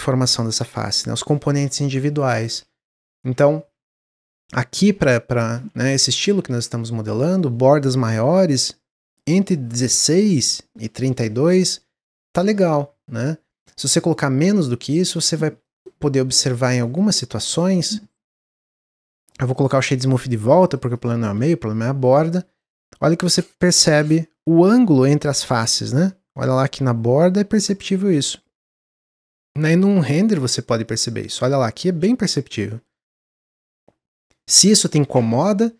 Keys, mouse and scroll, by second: 2.4 ctrl+z, 2.7 ctrl+z, 3.0-3.7 ctrl+scroll down 2, 3.7 ctrl+z, 3.9 ctrl+z, 4.2 ctrl+z, 4.5-5.1 ctrl+scroll down 1, 5.1-5.5 scroll down 1, 5.5 ctrl+z, 5.8 ctrl+z, 6.2 ctrl+z, 6.7-8.0 middle drag, 8.0 ctrl+b, 12.0-15.0 drag, 15.3 Tab, 15.6-16.3 middle drag, 16.3 click, 16.8 middle click, 16.9-17.5 scroll up 5, 17.5-18.4 shift+middle drag, 18.4-19.1 right drag, 19.1 click, 19.4-20.6 right drag, 20.6 click, 20.8 drag, 21.9 click, 28.2 click, 28.8 click, 29.1-30.4 middle drag, 30.4 drag, 30.8 click.